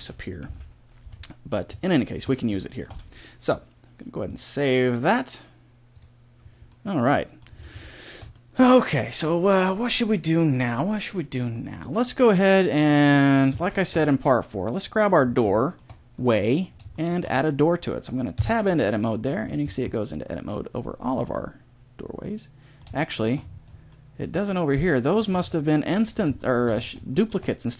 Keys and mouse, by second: 0.4 ctrl+Down, 1.0 a, 4.4-6.0 drag, 18.3 Tab, 19.4 middle click, 22.9 middle click, 23.6-25.2 middle drag, 25.2 Tab, 25.4 middle click.